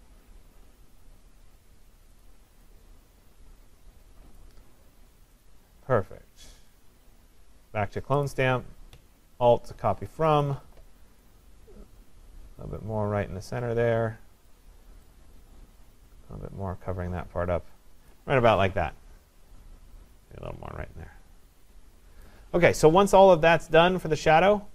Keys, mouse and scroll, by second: 2.3 click, 4.4 click, 5.5 click, 7.3 click, 10.5 alt+click, 14.5 click, 16.5 click, 18.1 click, 22.2 click.